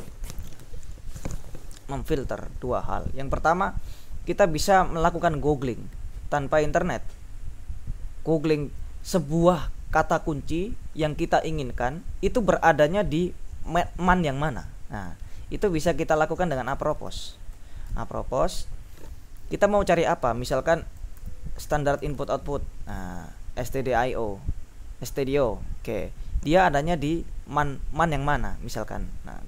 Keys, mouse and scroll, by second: 16.4-18.1 typing, 20.8-22.9 typing.